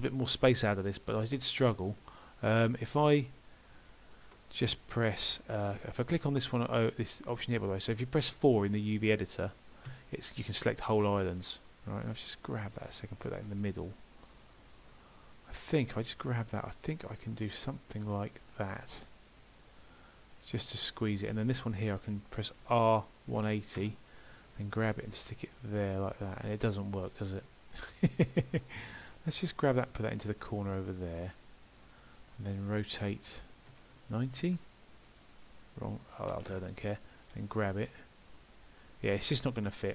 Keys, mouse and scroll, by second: 1.8 click, 10.4 click, 12.3 g, 15.4 click, 15.9 g, 21.2 click, 22.7 r, 29.2 click, 29.7 g, 32.1 click, 33.7 r.